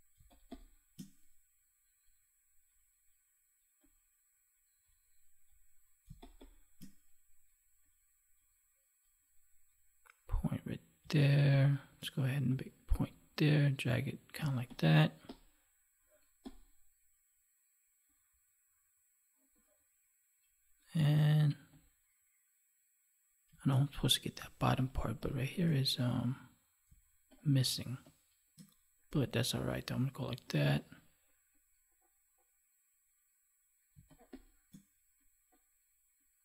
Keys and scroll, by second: 0.1 space, 6.0 space, 10.9 space, 14.3 space, 23.4 space, 26.8 space, 33.9 space.